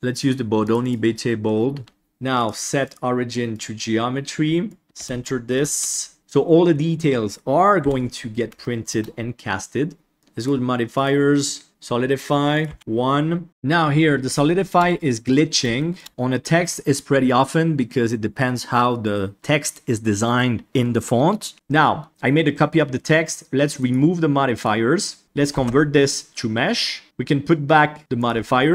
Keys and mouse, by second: 2.4-3.6 drag, 4.8 click, 5.0 KP_1, 5.8-6.3 shift+middle drag, 7.8 KP_1, 8.6 shift+middle drag, 11.1-11.7 drag, 12.5 click, 13.9-14.2 middle drag, 14.4 shift+middle drag, 14.8-15.2 middle drag, 15.7 shift+middle drag, 21.5 ctrl+z, 24.6 click, 25.5 alt+c, 27.0-28.2 drag.